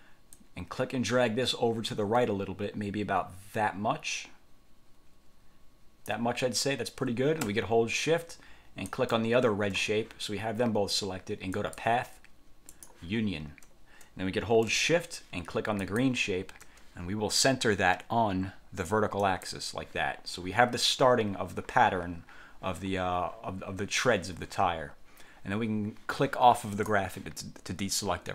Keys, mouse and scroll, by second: 0.5-6.4 ctrl+drag, 9.0 shift+click, 11.7 click, 12.8 click, 16.0 shift+click, 19.4 click, 26.8 click.